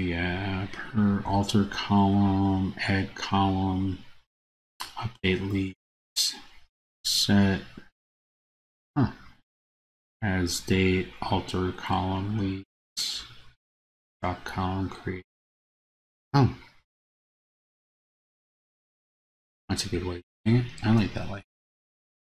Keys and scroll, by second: 21.2 super+c.